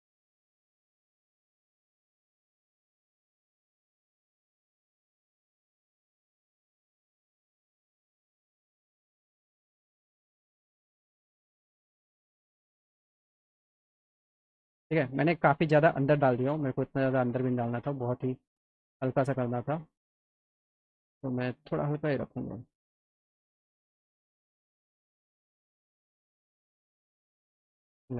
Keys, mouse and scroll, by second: 0.1-1.9 drag, 2.3 middle click, 3.3 ctrl+click, 4.5 middle click, 5.9 click, 6.2 scroll up 2, 6.9-8.0 drag, 8.6 click, 9.6-10.9 drag, 12.5 alt+middle click, 12.8 alt+click, 13.1 click, 13.8 alt+click, 14.3 middle click, 14.8 middle click, 16.3 middle click, 18.1 click, 19.0 click, 20.3-22.5 drag, 22.9 alt+middle click, 23.8 middle click, 24.1 alt+middle click, 25.7 click, 26.1 click, 27.5 alt+middle click.